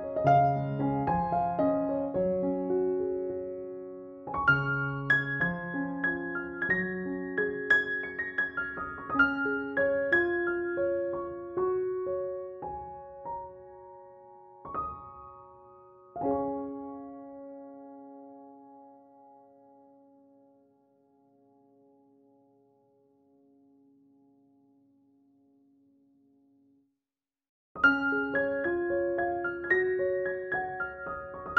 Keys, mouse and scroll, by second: 2.6 ctrl+b, 3.6 click, 4.7 ctrl+z, 5.1-5.6 click, 7.7 alt+click, 8.5 ctrl+=, 9.0-10.4 [, 10.8 space, 10.9-11.4 click, 11.5 ctrl+=, 12.4 ctrl+-, 12.8 ], 13.1-17.0 drag, 16.9-18.8 typing, 17.9 click, 18.5 click, 19.1-19.9 drag, 20.4-28.7 typing, 20.5-21.0 click, 21.9 click, 22.4-22.9 click, 26.9 click, 28.0 click, 29.2 click, 29.7 ctrl+-.